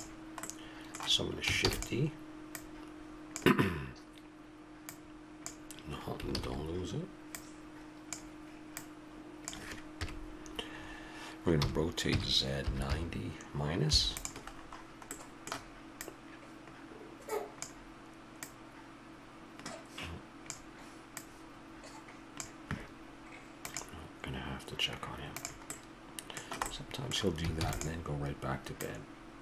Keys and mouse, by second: 1.7 shift+d, 4.8-6.3 drag, 6.3 ctrl+z, 10.0 KP_Decimal, 11.6 r, 16.0-18.0 drag, 18.4-20.0 drag, 25.7-27.6 middle drag, 27.6 shift+d, 28.8-29.4 drag.